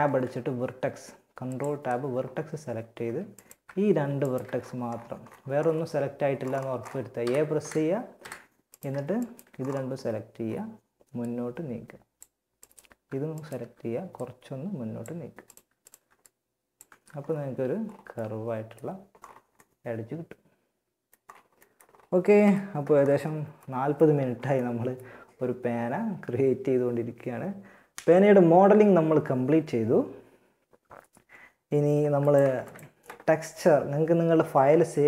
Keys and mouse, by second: 2.2 a, 6.5 a, 6.8 a, 7.4 a, 14.4 right click, 15.2 right click, 16.1 Tab, 17.5-18.8 middle drag, 21.6 KP_1, 31.4 click, 34.4 ctrl+s.